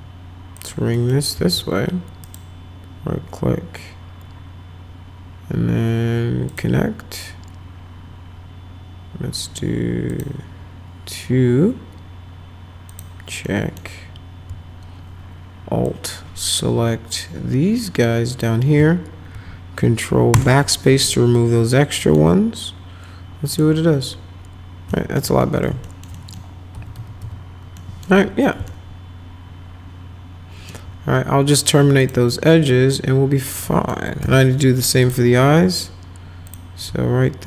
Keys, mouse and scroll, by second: 0.6 click, 1.0 middle click, 2.3 right click, 6.5 click, 10.1 click, 12.9 click, 13.5 middle click, 15.9-18.4 alt+drag, 20.3 ctrl+BackSpace, 22.0 middle click, 23.5 click, 24.9 alt+middle click, 25.4 middle click, 25.8 alt+middle click, 26.2 middle click, 26.7 F4, 27.0 F3, 27.2 F3, 27.8 middle click, 28.7-30.7 alt+middle drag, 32.0 click, 33.6 middle click, 34.2 F4, 35.0 click, 35.9-36.5 scroll down 2, 36.5 click.